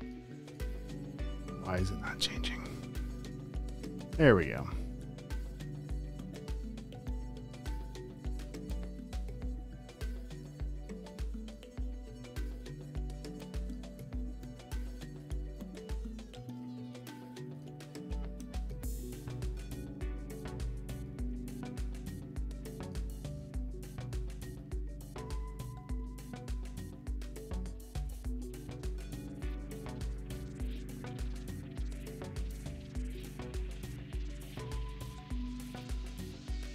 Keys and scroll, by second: 5.7 e, 7.8 v, 15.6-17.0 typing, 27.1 super+r, 29.6 space, 30.2 super+space, 31.1 super+;, 32.0 space.